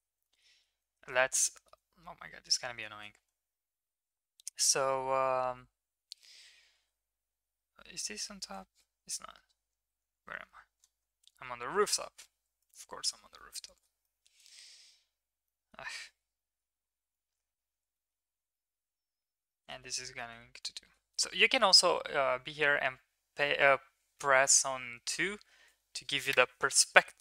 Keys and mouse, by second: 0.2 shift+middle click, 1.3-1.7 shift+middle drag, 3.0 shift+middle click, 5.5 Tab, 8.0 KP_7, 11.2-11.9 shift+middle drag, 12.6 shift+middle drag, 13.4 middle click, 14.0 middle click, 15.5 shift+middle click, 16.4 shift+middle click, 17.1 shift+middle click, 17.9 shift+middle click, 18.5 middle click, 19.5 shift+middle click, 19.8 middle click, 20.6 shift+middle click, 22.4 KP_2, 24.2 middle click, 25.1 KP_2.